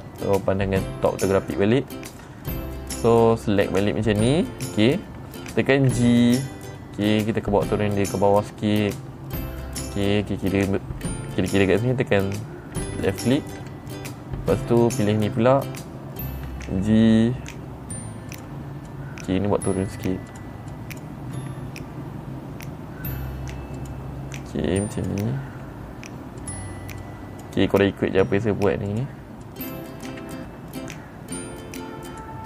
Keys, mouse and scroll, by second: 0.0 click, 3.7-4.8 drag, 6.3 g, 12.7 click, 13.5 middle click, 13.5-14.0 scroll up 5, 13.8 middle click, 14.1 middle click, 14.1 scroll down 2, 15.1 click, 17.0 g, 18.8 click, 19.4 click, 20.2 g, 20.8 click, 21.2 click, 21.8 g, 24.2 click, 25.3 click, 26.0 g, 26.9 click, 27.5 click, 28.4 g, 29.4 click, 29.9 click, 30.5 g.